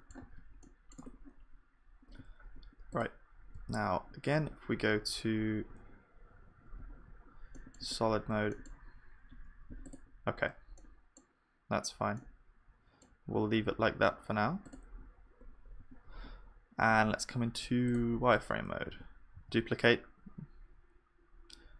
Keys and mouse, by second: 0.2 ctrl+s, 1.0 Tab, 3.0-4.9 drag, 3.5 middle click, 3.6 z, 6.8 z, 7.4-10.9 middle drag, 7.8 Tab, 9.3 KP_1, 10.1 click, 11.9-14.9 middle drag, 15.1-18.3 middle drag, 15.8 KP_1, 18.9 shift+d.